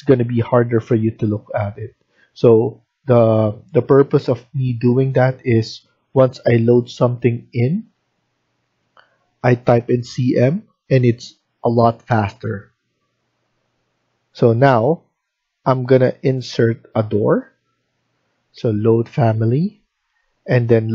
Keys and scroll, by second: 2.1 Escape, 2.3 Escape, 3.1 Escape.